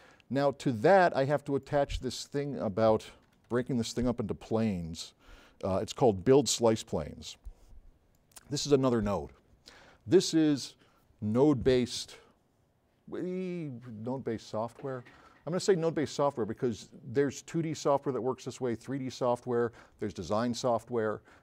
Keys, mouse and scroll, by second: 3.1-4.5 typing, 6.6-7.7 drag.